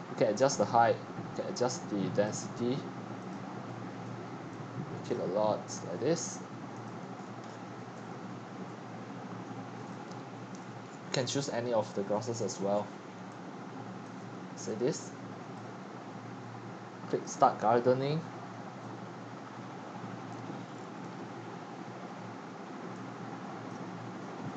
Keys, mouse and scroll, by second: 1.7-2.2 drag, 4.7 click, 7.1 middle click, 7.1 scroll down 1, 7.2 scroll down 1, 7.5 scroll down 1, 7.5-7.9 scroll down 1, 8.1 click, 8.9 Escape, 9.9-10.6 drag, 10.6 scroll down 1, 10.7 scroll down 1, 10.7 scroll down 1, 10.8 scroll down 1, 10.9 scroll down 1, 11.1 scroll down 1, 11.2 scroll down 1, 11.4 middle click, 12.3 right click, 12.4 middle click, 12.5-13.2 scroll, 13.2-24.5 typing, 14.1 right click, 15.6-18.6 right drag, 20.7-21.4 scroll, 21.5-23.7 drag, 23.7-24.5 right drag.